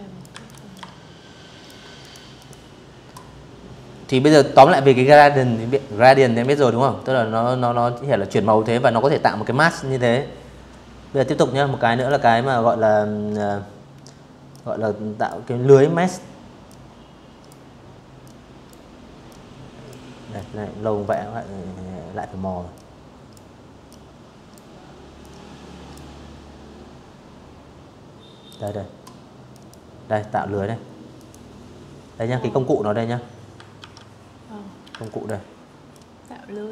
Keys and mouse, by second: 0.0 click, 3.9 v, 9.6 click, 12.2 click, 14.3 click, 15.9 click, 16.9 click, 18.0-18.7 drag, 20.4 click, 21.5 click, 22.9 click, 26.1 click, 27.2 click, 28.8 click, 31.4 ctrl+1, 32.6 ctrl+click, 33.6 ctrl+click, 36.6 Escape.